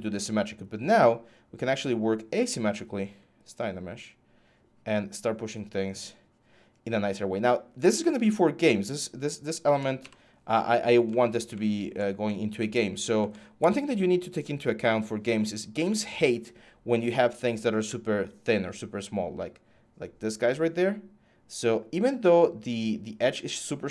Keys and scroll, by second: 0.0-0.2 typing, 9.8 f.